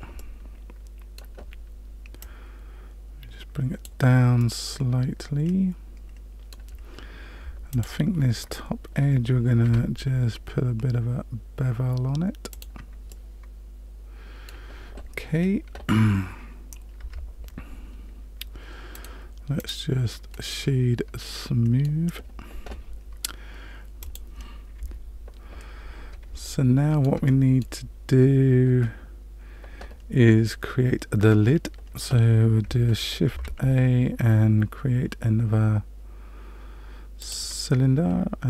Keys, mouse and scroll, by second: 0.1 middle click, 2.2 click, 4.4 middle click, 7.7 alt+click, 9.6 ctrl+b, 13.1 middle click, 17.0 Tab, 18.9 right click, 20.3 middle click, 23.9 shift+middle click, 24.0 click, 24.7 KP_Decimal, 26.4 shift+middle click, 27.2 middle click, 30.2-30.8 scroll down 1, 31.5-32.6 scroll down 1, 33.2 shift+a.